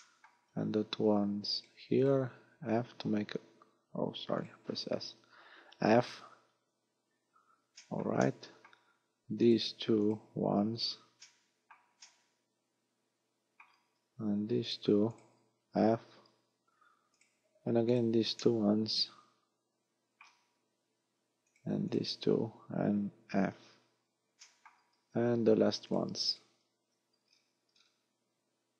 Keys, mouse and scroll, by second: 0.0 shift+middle click, 0.6-0.9 scroll up 4, 1.6 shift+right click, 2.0 shift+right click, 2.7 s, 4.4 right click, 5.8 f, 6.2-6.6 scroll down 3, 7.2-7.5 scroll up 3, 7.8 shift+middle click, 8.2 middle click, 9.4 right click, 10.1 shift+right click, 10.6 scroll up 4, 11.2 shift+middle click, 12.0 shift+middle click, 14.7 shift+right click, 15.2 shift+right click, 16.2 f, 17.2 right click, 18.0 shift+right click, 18.4 shift+middle click, 21.6 shift+right click, 21.9 shift+right click, 23.4 f, 23.6 scroll down 5, 24.4 shift+middle click, 25.0-25.3 scroll up 4, 25.9 right click, 26.3 shift+right click, 27.2-28.0 scroll down 10, 28.6-28.7 scroll up 11.